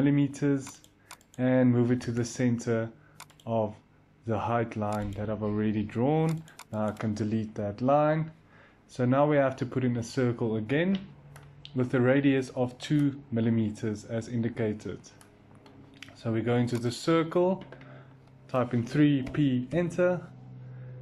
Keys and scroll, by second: 1.8 m, 7.5 Delete, 18.6 3, 19.1 p, 19.6 Return.